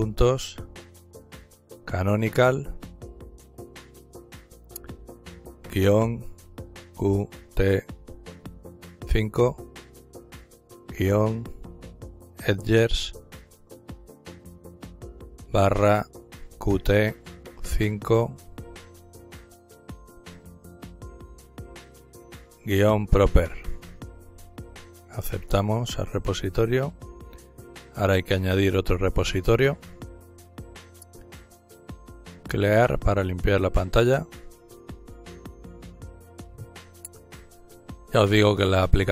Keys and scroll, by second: 0.8-2.8 typing, 4.4-5.4 typing, 6.4-7.6 typing, 8.8 typing, 9.9-12.8 typing, 14.9-16.3 typing, 17.5 typing, 21.1-23.2 typing, 24.1 Return, 25.8 Return, 28.3 typing, 35.6-36.8 typing, 37.2 Return.